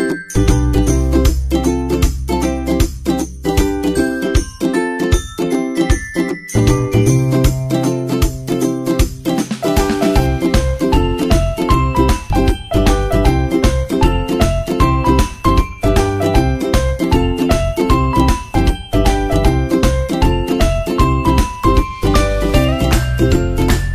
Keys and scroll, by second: 8.8 super+Tab, 9.6 super+s, 9.6 super+Tab, 23.2 super+Tab, 23.4 super+Tab.